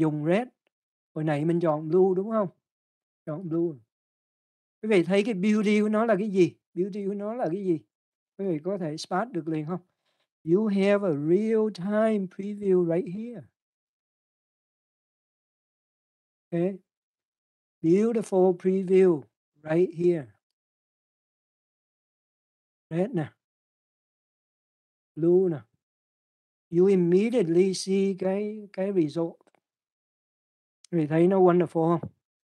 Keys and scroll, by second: 16.7 ctrl+0.